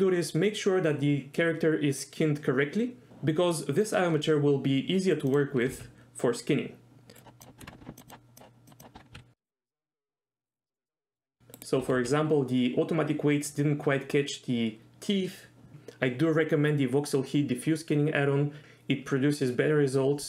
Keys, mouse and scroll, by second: 5.3 click, 5.6 r, 5.7 r, 7.1 right click, 7.6 Tab, 8.0 click, 8.7 click, 8.9 Tab, 9.1 r, 10.0 r, 10.5 right click, 10.8 shift+middle click, 11.0 middle click, 11.3 r, 11.6 right click, 11.6 r, 11.9 r, 12.0 r.